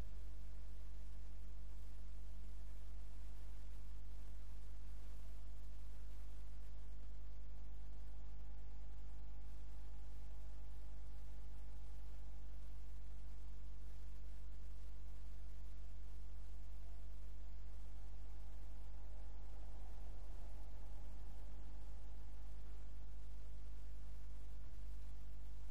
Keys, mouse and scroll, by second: 3.8 click, 21.8 click, 23.5-25.4 right drag, 24.7 x.